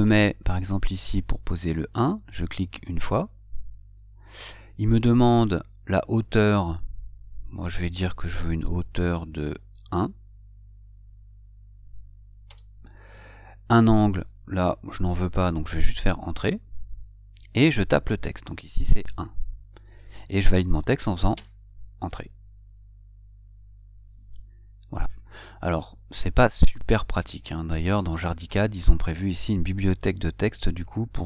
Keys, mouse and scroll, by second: 3.4 click, 12.8 Return, 16.7 Return.